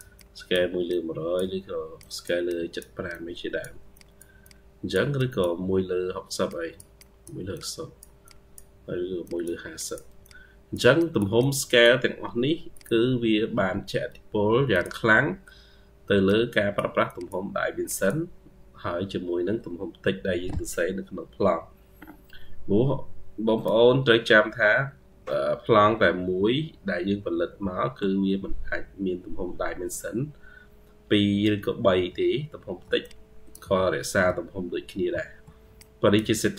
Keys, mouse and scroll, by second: 2.3 double click, 4.3 double click, 6.8 double click, 7.4 double click, 9.6 double click, 11.2 double click, 21.0 Escape, 22.6-23.5 scroll down 3, 24.0-24.9 scroll down 23, 25.5-26.7 scroll down 27, 26.8-27.6 scroll down 24, 28.1-28.8 scroll down 32, 29.4-30.4 scroll down 34, 30.4-31.3 scroll down 13, 31.3-31.9 scroll down 21, 32.3 ctrl+scroll up 1, 32.9-33.2 ctrl+scroll up 2, 33.8-34.2 ctrl+scroll down 1, 34.6-35.1 scroll down 22, 36.4-36.5 scroll up 10.